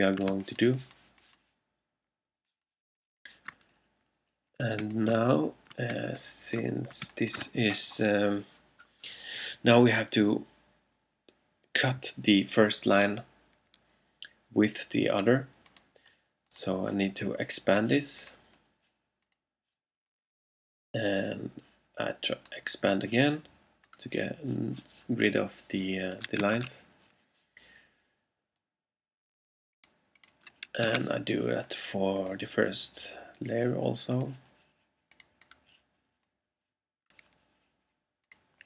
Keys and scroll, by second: 0.3 alt+space, 4.9 alt+space, 7.1 alt+space, 8.1 space, 26.6 super+a, 31.1 super+a.